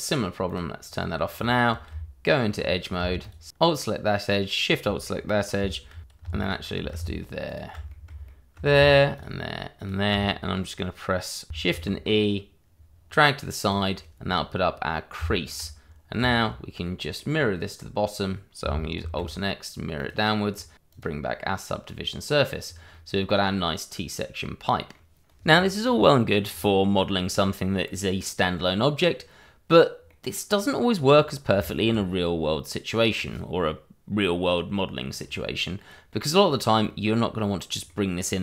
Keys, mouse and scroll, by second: 0.0 shift+z, 0.2 scroll down 1, 0.3 middle click, 1.3 click, 1.6 scroll up 1, 2.5 Tab, 3.2 alt+click, 3.2 click, 3.8 shift+middle click, 4.8 alt+shift+click, 6.4 alt+shift+click, 6.4 click, 7.4 alt+shift+click, 7.8 middle click, 8.2 shift+middle click, 9.1 shift+click, 9.7 click, 11.7 shift+e, 13.6 click, 15.1 Tab, 15.8-16.2 scroll down 1, 16.6 shift+middle click, 16.8 middle click, 19.0 alt+x, 19.9 click, 20.9 click, 22.6 scroll down 1, 22.9 middle click, 25.4-26.4 scroll down 1, 26.4 scroll down 1, 27.3 middle click, 31.6 shift+middle click, 32.2 middle click, 35.6 middle click.